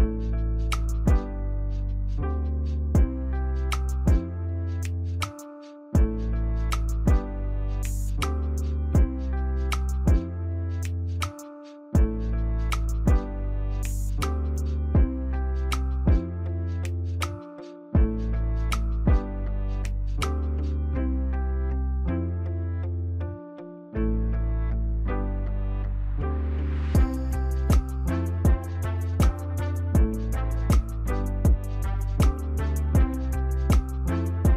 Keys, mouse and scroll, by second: 7.2 ctrl+=, 7.5 ctrl+=, 14.4 ctrl+=, 23.6 Return, 25.5 scroll up 1, 25.6 scroll down 1, 25.8-27.6 scroll up 12, 27.7 ctrl+scroll down 1, 27.8 ctrl+right click, 28.4-29.1 ctrl+scroll up 1, 29.1-29.5 ctrl+scroll up 2, 29.6-31.7 scroll down 1, 32.0 ctrl+-, 32.3 ctrl+-, 32.8 ctrl+-.